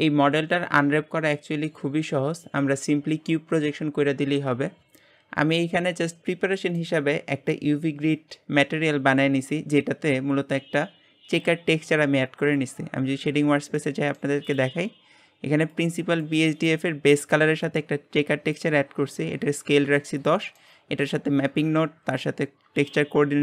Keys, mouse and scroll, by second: 5.7-12.5 middle drag, 12.5 click, 14.5-23.4 drag.